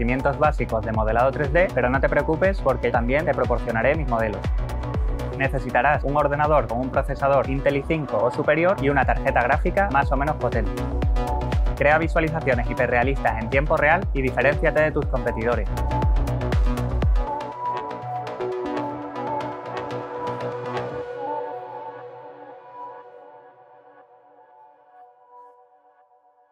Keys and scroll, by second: 1.2-1.6 scroll down 2.